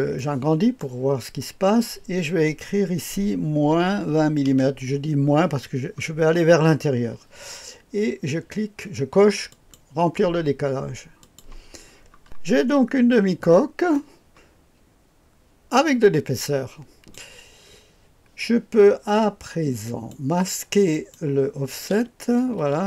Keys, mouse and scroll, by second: 0.1 middle click, 0.7 click, 1.8 click, 3.7 -, 4.1 KP_2, 4.4 KP_0, 9.5 click, 11.2 click, 11.8-12.2 scroll down 1, 12.0 click, 12.7-13.1 scroll up 2, 13.1-13.9 scroll down 2, 13.9-17.2 drag, 19.8 click, 20.9 click, 21.9 space, 22.6 space.